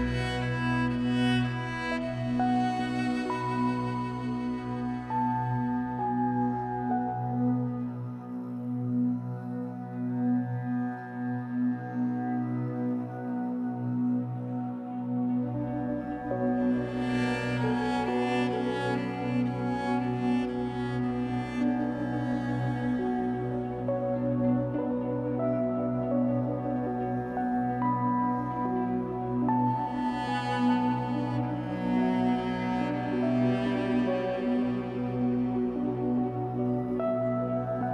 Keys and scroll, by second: 13.0 Escape, 15.1 2, 24.8 r, 25.8 alt+x, 27.5 r, 28.1 alt+x.